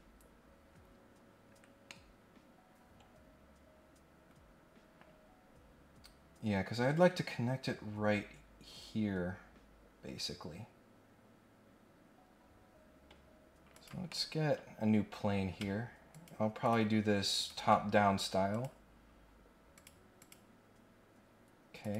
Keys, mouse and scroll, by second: 1.8-4.9 middle drag, 5.2-5.6 scroll up 2, 9.4 scroll down 1, 13.7 click, 14.1 middle click, 14.5 scroll up 1, 14.9 scroll down 1, 15.2 scroll up 1, 16.1 ctrl+click, 16.6 ctrl+click, 17.3 ctrl+click, 18.5 click, 19.7 click, 20.2 click, 21.8 click.